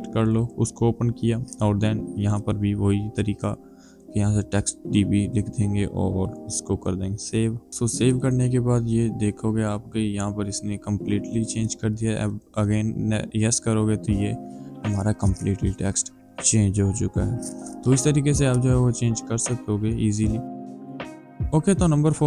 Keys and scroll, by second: 4.2-5.0 typing.